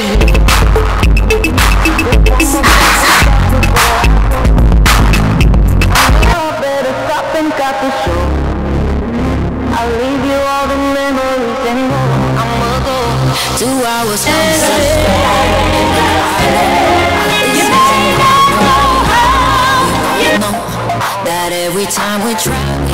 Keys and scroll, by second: 6.3 Page_Down, 21.0 Page_Down.